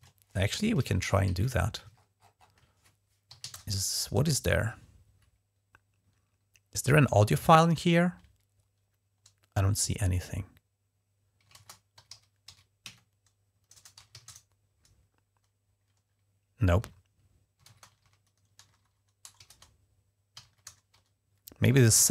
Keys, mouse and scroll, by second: 0.0-0.2 typing, 0.6 ctrl+`, 1.8-2.6 ctrl+scroll up 2, 2.9-3.6 typing, 11.3-14.7 typing, 17.1-21.7 typing.